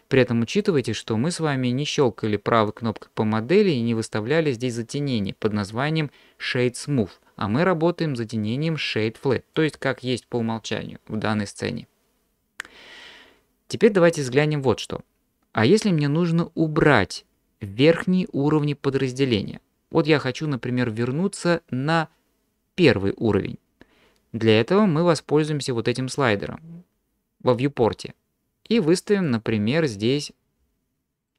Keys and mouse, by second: 0.7 click, 2.6-8.9 drag, 9.6 click, 28.7 click, 29.3 click.